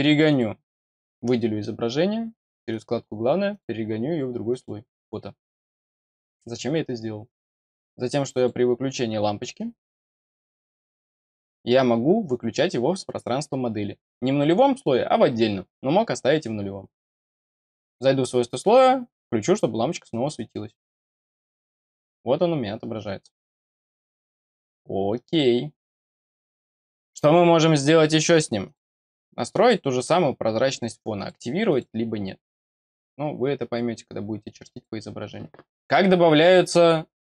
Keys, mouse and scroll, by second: 0.2 click, 2.6 click, 3.4 click, 4.4 click, 7.2 click, 8.3 click, 9.7 click, 17.8 click, 20.2 click, 21.7 click, 25.8 click, 26.1 click, 28.6 click, 31.1 click, 31.6 click, 34.6 click.